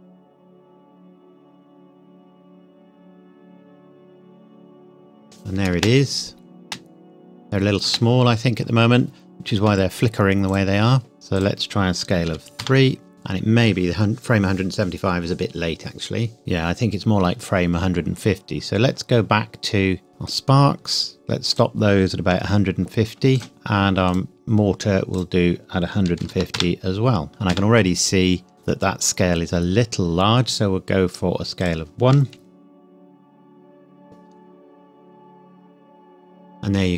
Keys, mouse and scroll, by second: 5.7 space, 10.5 click, 11.4 click, 12.3 KP_3, 12.6 KP_Enter, 13.1 space, 16.4 space, 18.5-20.3 scroll up 1, 20.3 click, 23.5 KP_Enter, 24.1 click, 26.1 KP_1, 26.2 KP_5, 26.6 KP_Enter, 27.3 KP_0, 27.5 KP_Enter, 29.7-30.1 scroll down 1, 31.6 click.